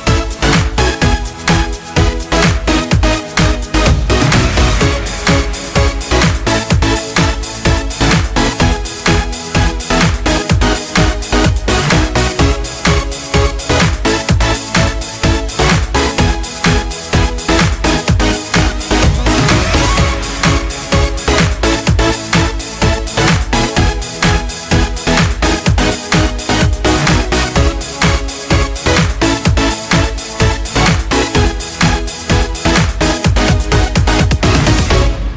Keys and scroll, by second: 21.7 ctrl+space.